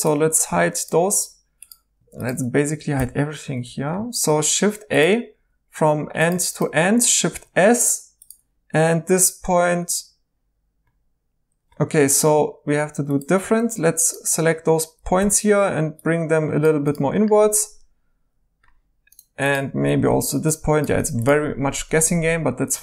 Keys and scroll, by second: 0.5 h, 2.9 h, 4.5 a, 7.3 s, 11.8 Escape, 13.4 x, 15.1 g, 20.0 g, 22.1-22.8 typing.